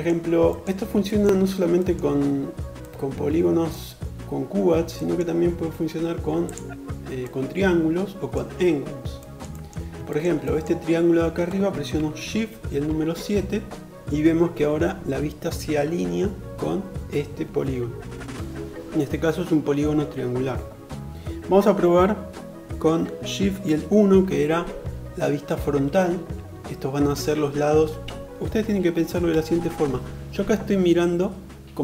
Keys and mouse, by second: 6.3-28.4 middle drag, 12.7 shift+KP_7, 25.4 shift+KP_1, 29.1 shift+KP_7.